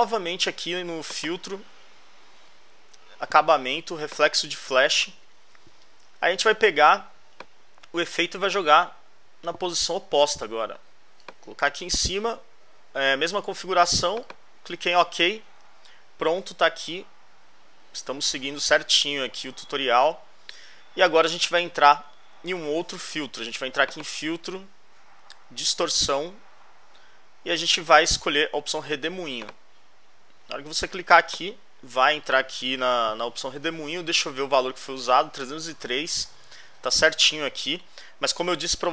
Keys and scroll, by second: 15.7 alt+Left, 33.6 alt+Left.